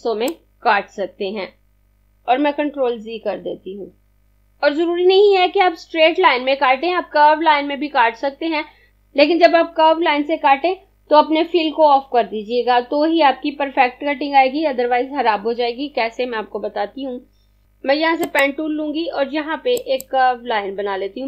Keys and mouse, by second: 3.4 z, 4.1 z, 18.4 click.